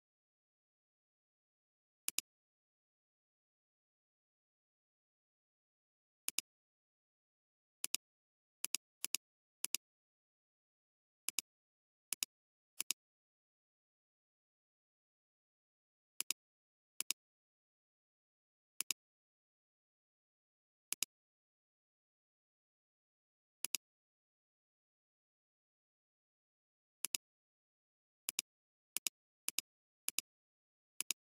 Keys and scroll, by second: 16.9 space, 17.7 alt+space, 18.7 alt+space, 23.6 alt+space, 24.6 [, 25.8-26.9 typing, 27.6 alt+space.